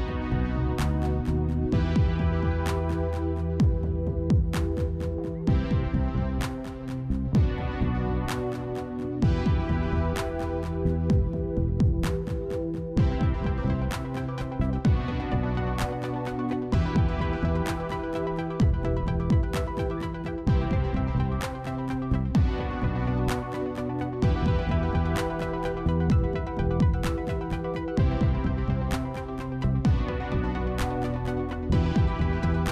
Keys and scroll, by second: 3.3 s, 5.7 ctrl+z, 6.8 s, 9.5 q, 10.7 1, 14.1 1.